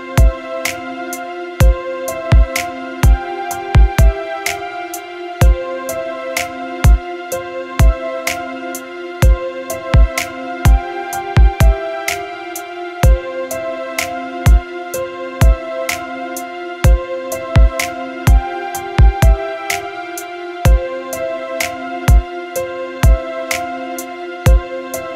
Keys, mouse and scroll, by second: 5.8 click, 11.9-24.0 drag.